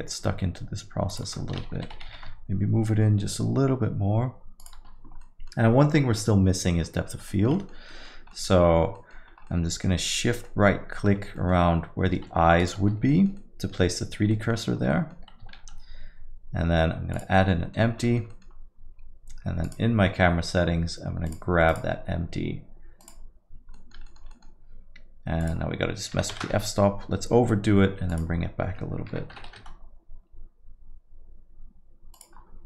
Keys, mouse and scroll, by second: 1.8 g, 5.2 middle click, 7.3 alt+middle click, 7.5 middle click, 7.9 middle click, 7.9 alt+middle click, 8.3 middle click, 8.4 alt+middle click, 8.6-9.5 scroll up 6, 8.9 middle click, 9.5 middle click, 10.2 alt+middle click, 10.4 middle click, 11.2 scroll up 1, 11.3 middle click, 12.6 shift+right click, 13.1 middle click, 13.4 alt+middle click, 13.8 middle click, 14.1 scroll down 1, 14.3 middle click, 14.7 scroll up 1, 14.9 middle click, 15.5 shift+a, 17.5 middle click, 17.8 scroll down 1, 18.1 alt+middle click, 18.3 middle click, 18.5 scroll down 1, 19.6 click, 21.4 click, 23.7 click, 23.7 middle click, 24.1 alt+middle click, 24.3 middle click, 25.4 click, 29.7 click, 32.1 click.